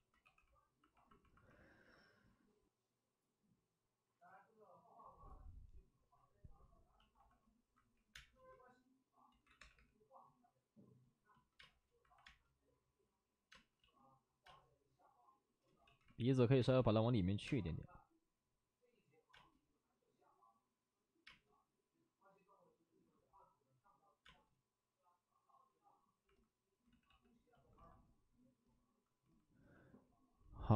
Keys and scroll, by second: 0.2 2, 8.0 3, 8.0 space, 9.5 ctrl+z, 9.5 3, 9.7 3, 11.5 space, 12.0 alt+s, 12.2 space, 13.7 ctrl+z, 13.7 space, 14.4 space, 15.8 ctrl+z, 16.5 space, 16.8 alt+s, 17.4 space, 24.2 space, 26.8 ctrl+z, 27.0 ctrl+z.